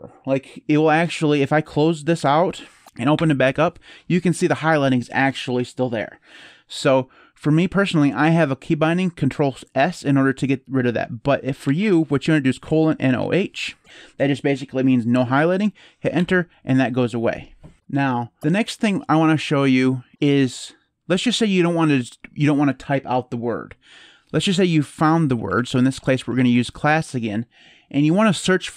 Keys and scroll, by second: 1.7-2.5 typing, 2.8 Up, 2.9 Return, 11.4-13.5 typing, 15.9 Return, 24.1-26.8 typing.